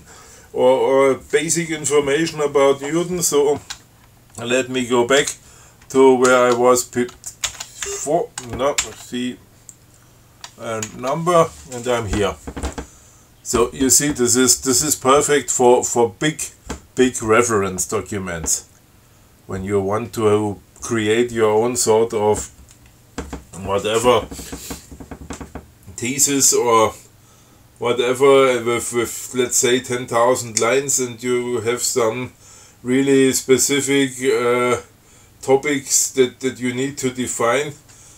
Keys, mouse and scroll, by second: 5.4 ctrl+c, 6.5 ctrl+6, 7.7 ctrl+c, 8.1 ctrl+F6, 9.0 ctrl+c, 11.1 shift+6.